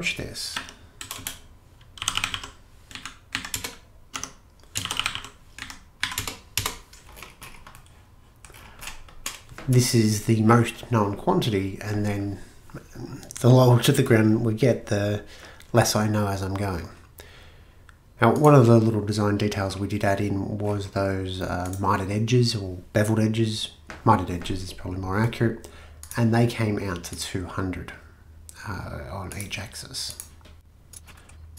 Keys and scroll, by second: 0.3-8.9 typing, 3.4 Down.